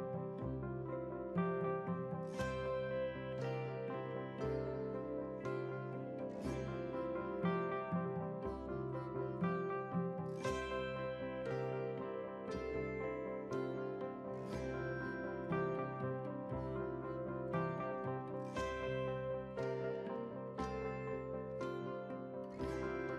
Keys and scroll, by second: 13.4 ctrl+z.